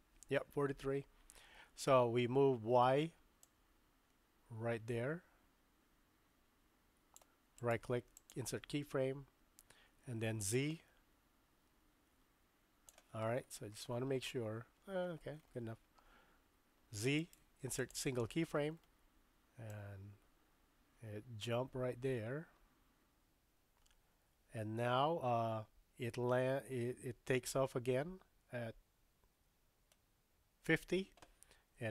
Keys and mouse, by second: 0.5 Right, 3.5-7.2 drag, 7.7 right click, 10.5-13.0 drag, 13.8 shift+middle click, 17.2 right click, 19.7-30.7 drag.